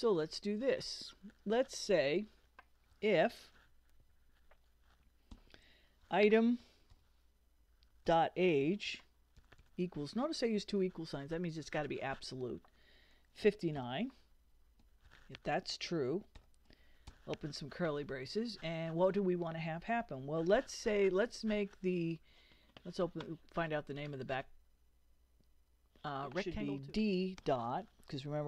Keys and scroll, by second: 0.0 Return, 2.7-4.1 typing, 5.3-9.4 typing, 13.4 5, 13.8 9, 14.8 shift+9, 15.1 shift+0, 16.4 shift+[, 17.1 shift+Return, 17.7 Return, 26.9 d, 27.4 ..